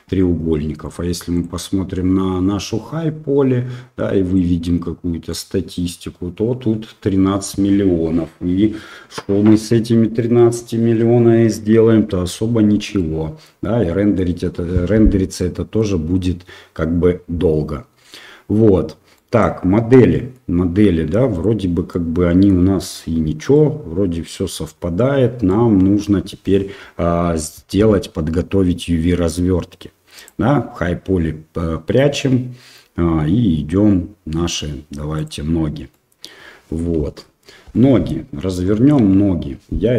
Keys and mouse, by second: 0.8 click, 4.4-5.6 drag, 13.1-14.2 middle drag, 15.5 middle click, 19.2 middle click, 20.2 middle click, 22.0-22.5 middle drag, 23.6-24.3 middle drag, 25.6-26.0 middle drag, 35.1 click, 35.9-36.2 middle drag, 37.2 KP_Divide, 37.7-38.0 middle drag, 38.6 shift+middle drag.